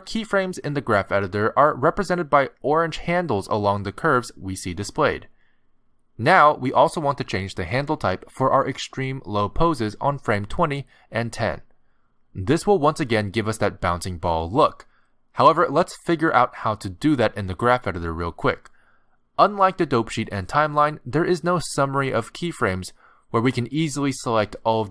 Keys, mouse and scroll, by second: 3.0 middle click, 4.2-5.3 scroll up 8, 5.3 middle click, 16.5 click, 18.5 space, 20.7 click, 20.7 space, 22.0 ctrl+Tab, 23.5 click, 24.3 click, 24.8 click.